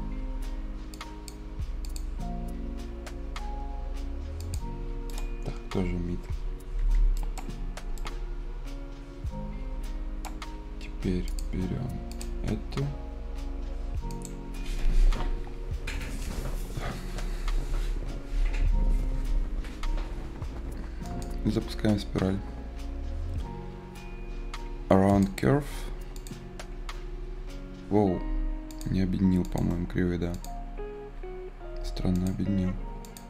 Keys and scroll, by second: 6.5 Escape, 29.1 Escape, 31.7 Escape.